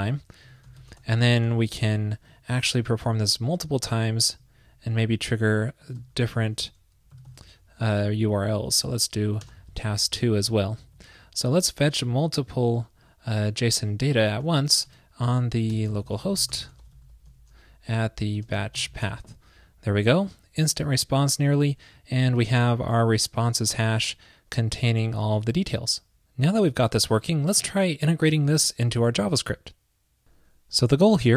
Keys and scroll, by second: 6.0 super+c, 7.3 super+v.